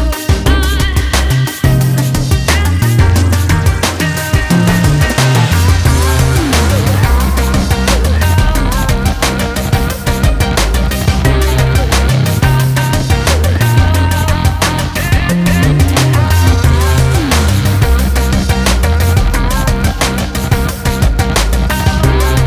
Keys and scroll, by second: 16.4 ctrl+space, 16.8 ctrl+space, 16.9 ctrl+space, 18.2-18.9 ctrl+space.